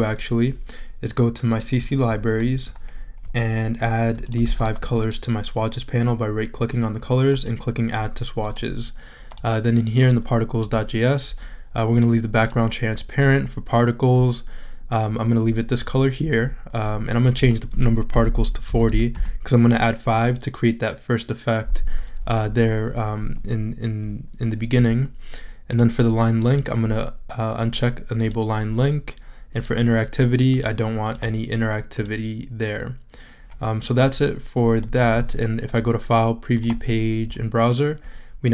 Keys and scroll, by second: 17.9-18.8 typing, 19.1 Return.